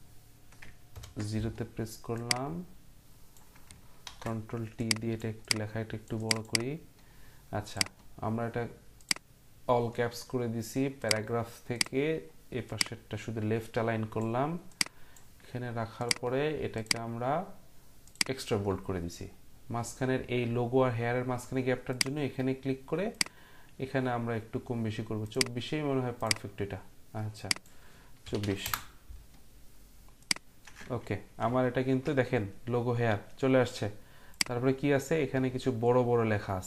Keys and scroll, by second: 0.9 ctrl+0, 4.0 ctrl+t, 28.0-28.9 typing.